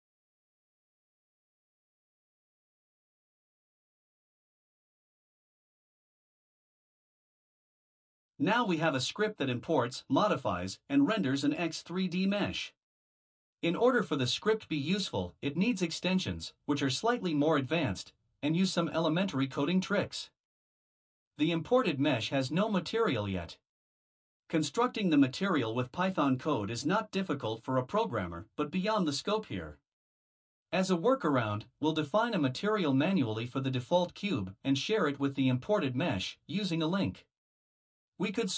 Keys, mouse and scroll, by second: 1.5 click, 2.1 Return, 2.7-4.4 typing, 6.0 shift+0, 7.1 ctrl+v, 36.0 click.